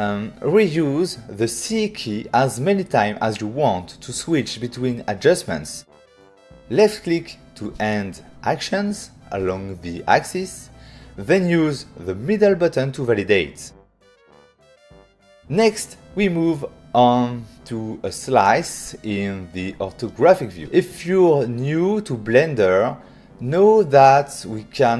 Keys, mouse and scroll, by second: 5.3 shift+click, 8.2 click, 11.0 right click, 12.4 <, 12.9 <, 13.6 <, 14.7 ctrl+middle click, 18.4 shift+middle click.